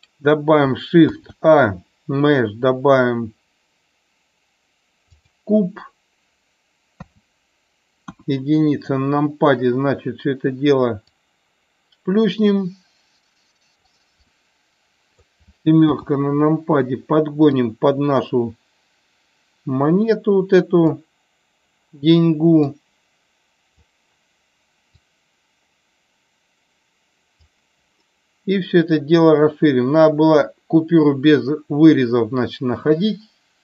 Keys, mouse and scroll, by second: 1.1 shift+a, 7.1 KP_3, 8.0 KP_1, 11.1-13.7 drag, 14.2-15.2 middle drag, 15.8 KP_7, 17.6-21.0 drag, 22.7-23.8 drag, 25.1-27.5 drag, 29.2-33.6 drag.